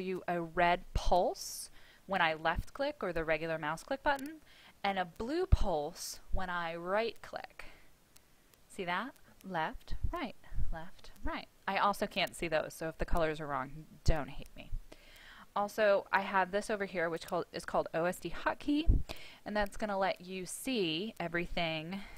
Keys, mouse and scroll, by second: 7.0 right click, 9.1 click, 9.7 right click, 10.3 click, 10.9 right click, 20.0 click, 21.7-22.1 typing.